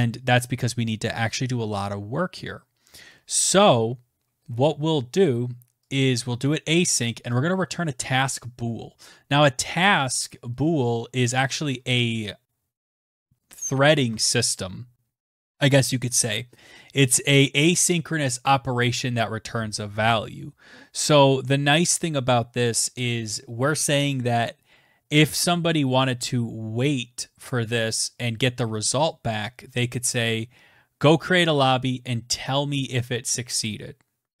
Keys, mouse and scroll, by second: 5.0 click, 7.1 click, 9.3 click.